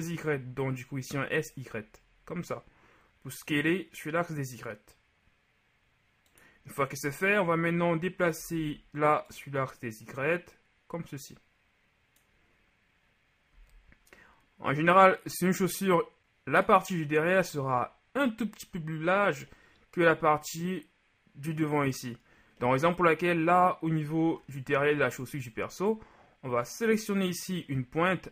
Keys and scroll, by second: 8.6 ctrl+z, 13.6 z.